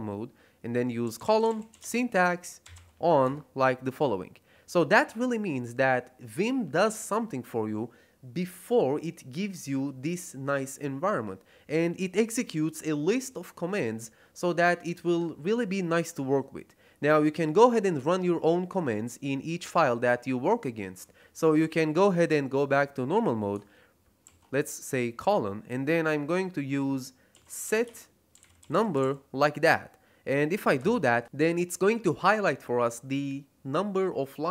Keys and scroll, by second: 0.7-3.2 typing, 19.5 Escape, 24.2 shift+;, 27.0-29.4 typing, 30.7 Return.